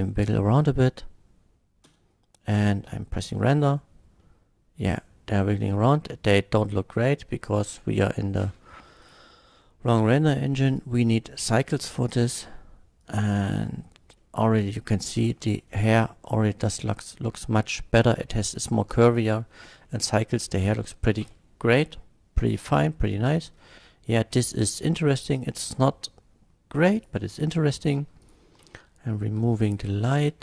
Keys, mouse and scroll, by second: 1.8 space, 2.5 F12, 4.3 middle click, 7.5 click, 8.3 scroll up 1, 9.0 click, 10.0 click, 10.7 click, 11.4 click, 12.1 click, 13.0 click, 14.1 middle drag, 14.7 middle drag, 15.3 shift+middle drag, 17.3 shift+middle click, 19.8-20.6 middle drag, 21.3 F12, 22.6 middle drag, 27.0 click, 28.2 click, 28.7 x, 29.6 click.